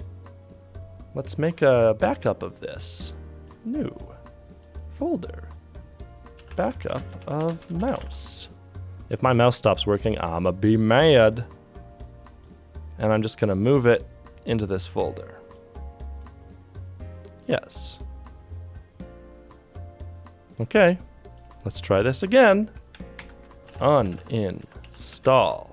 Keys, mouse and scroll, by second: 1.3 ctrl+c, 6.1-8.5 typing.